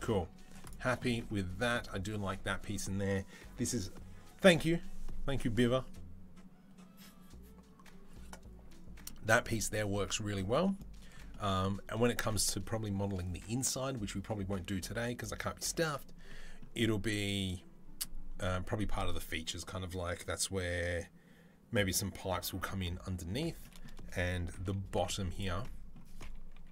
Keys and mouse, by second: 0.2 Tab, 0.5 click, 0.5 middle click, 1.4 click, 1.5-26.7 middle drag, 24.7 z, 26.4 KP_3.